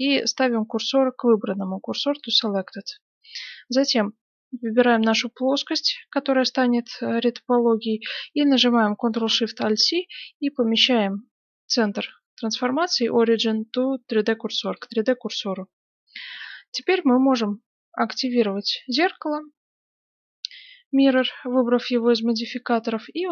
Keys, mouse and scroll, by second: 4.5 right click, 9.0 ctrl+alt+shift+c, 18.0-20.8 drag, 22.3-23.3 middle drag.